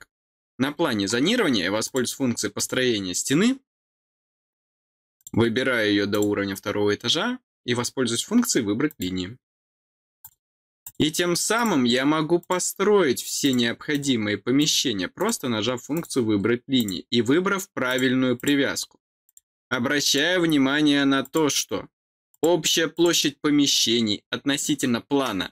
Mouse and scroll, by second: 1.7 click, 2.5 click, 5.1 click, 6.0 click, 8.8 click, 10.1 click, 10.7 click, 11.5 click, 12.3 click, 13.3 click, 13.8 click, 14.5 click, 15.1 click, 15.8 click, 16.7 click, 17.8 click, 18.3 click, 19.2 click, 20.0 click, 21.1 click, 22.2 click, 22.8 click, 23.6 click.